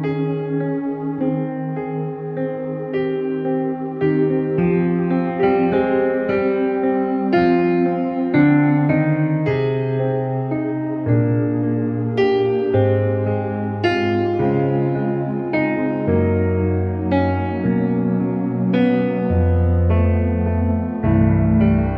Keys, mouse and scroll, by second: 2.4 space, 2.5 click, 2.7 space, 3.3 shift+w, 3.8 click, 11.1-12.6 typing, 11.4 click, 12.9 click, 15.5 space, 15.7 click, 15.8 space, 16.3 space, 16.5 space, 16.9 click, 17.9 space, 18.1 click, 18.2 space, 18.9 l, 19.4 click, 21.3 space, 21.5 click, 21.6 space.